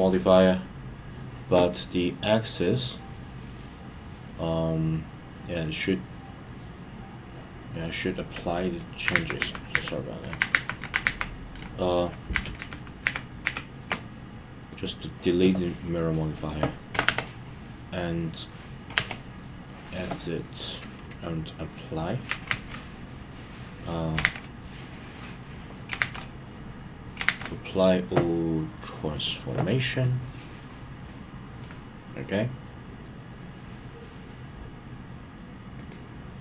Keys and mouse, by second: 7.9-8.7 right drag, 14.7 click, 30.4-31.6 middle drag, 35.7 click.